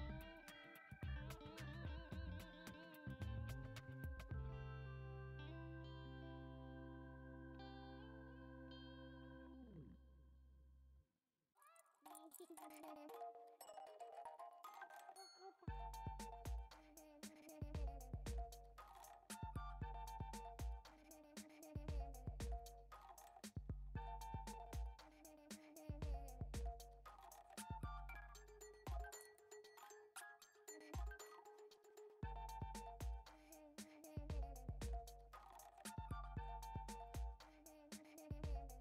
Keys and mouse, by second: 0.7 click, 1.2 click, 1.8 e, 5.7 click, 6.6 click, 8.2 ctrl+b, 15.4 click, 15.7 alt+z, 16.0 middle click, 16.7 click, 17.4 alt+z, 17.8 g, 19.1 s, 21.3 click, 21.6 shift+middle click, 22.1 click, 22.6 i, 23.8 e, 28.1 x, 29.1 click, 29.5 x, 30.6 middle click, 32.2 click, 33.2 click, 34.5 shift+middle click, 35.1 click, 35.6 click, 36.5 shift+click, 36.9 alt+z, 37.7 click, 38.7 click.